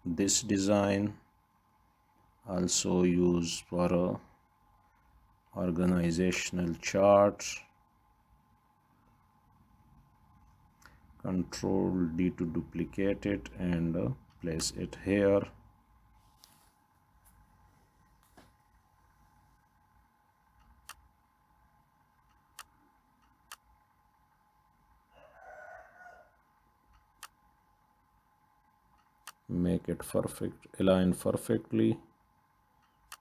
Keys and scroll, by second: 4.1 Right, 5.2 ctrl+d, 10.9 Up, 11.1 Up, 12.9 ctrl+d, 20.0 Left, 28.1 Up.